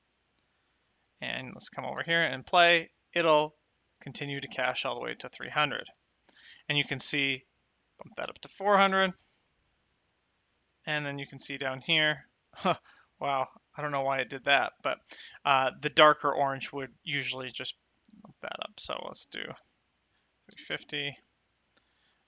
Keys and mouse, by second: 1.4 click, 1.9 space, 5.5 space, 7.9 click, 8.7 KP_4, 8.8 KP_0, 9.2 Return, 9.2 KP_Enter, 18.5 click, 20.1 KP_3, 20.3 KP_5, 20.5 KP_0.